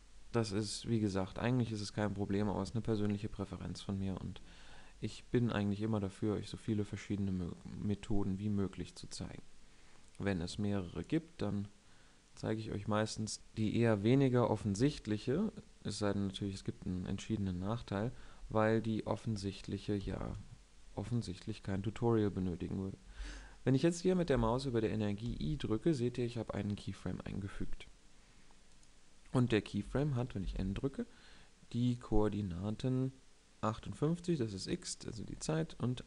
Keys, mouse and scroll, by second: 19.7 i, 24.9 i, 30.1 n.